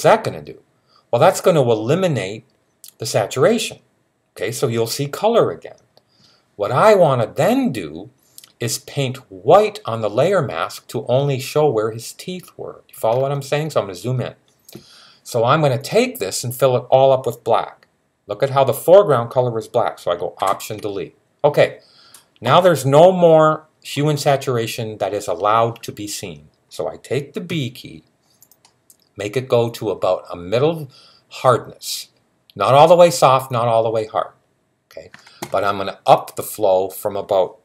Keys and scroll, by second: 27.3 b.